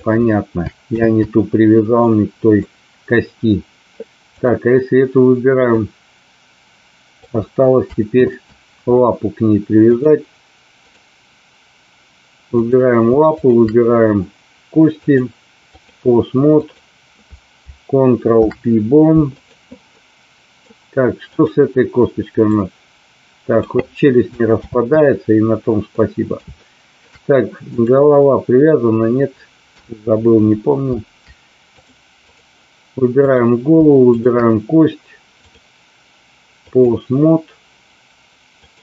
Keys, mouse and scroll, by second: 1.1 ctrl+z, 2.1 middle click, 4.3 click, 5.8-7.3 drag, 8.3 ctrl+z, 9.8-10.9 drag, 12.6 click, 13.3 shift+click, 14.9 click, 16.6 click, 18.2 ctrl+p, 19.9 middle click, 21.3 click, 22.4-23.6 drag, 24.7 ctrl+z, 25.8-27.1 middle drag, 27.7 click, 29.7 KP_3, 31.7-32.4 drag, 33.3 click, 35.4-36.8 drag, 38.6 click.